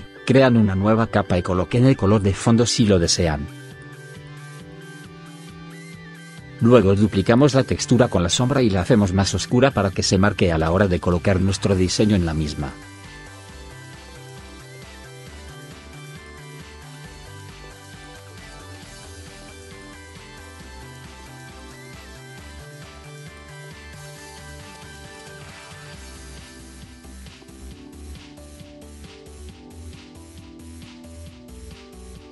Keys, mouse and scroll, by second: 7.4 right click, 20.7 click.